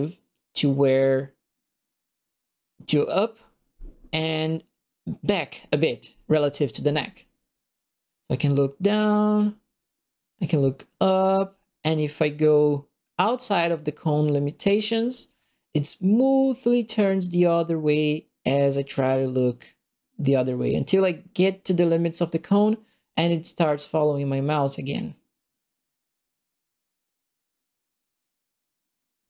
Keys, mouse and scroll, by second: 1.6 right click, 18.1 right click.